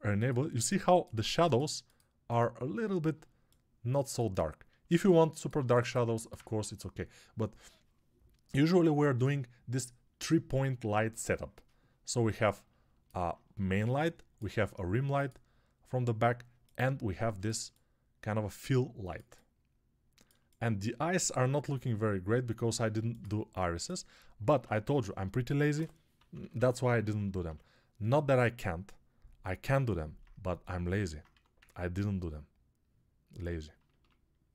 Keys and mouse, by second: 17.5-20.7 ctrl+alt+drag, 20.7-30.3 alt+right drag, 24.3 ctrl+Tab, 25.6-27.3 typing, 29.7 alt+click, 29.7 alt+middle click, 31.2 1.